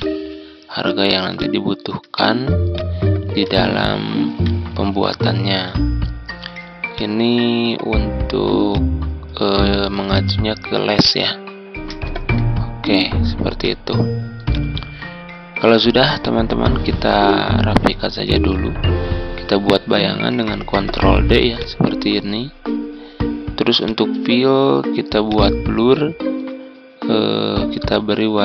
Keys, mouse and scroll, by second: 4.0 typing, 4.9 ctrl+z, 5.1-5.6 typing, 6.9 click, 12.2 typing, 13.6-17.5 drag, 20.8 ctrl+d, 21.5-28.4 drag.